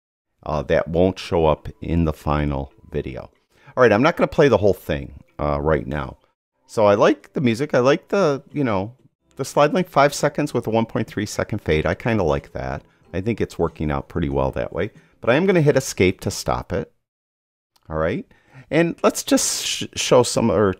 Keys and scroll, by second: 16.4 ↻.